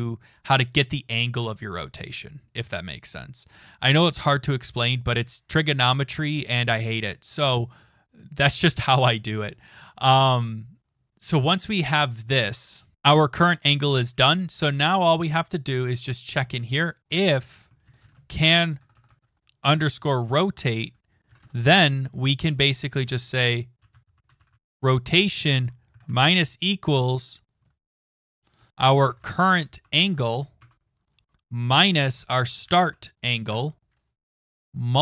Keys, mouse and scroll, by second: 0.7 click, 12.9-13.5 scroll down 7, 16.1 click, 16.8-19.4 typing, 20.2 Tab, 21.3 Return, 23.9-26.4 typing, 27.6-30.7 typing, 33.5 Tab.